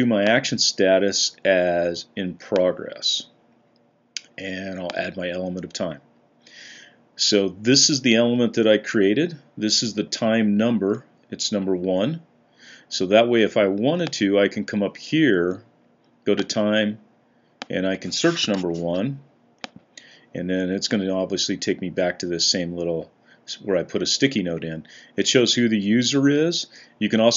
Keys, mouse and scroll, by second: 3.2 click, 18.3 1.